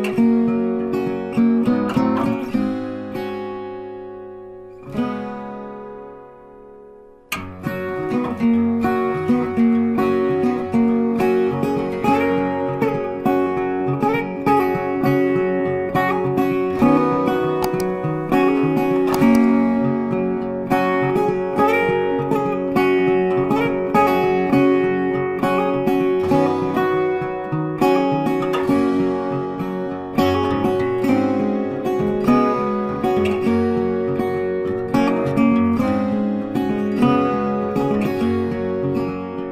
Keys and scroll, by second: 3.3 ctrl+t, 8.8 ctrl+t.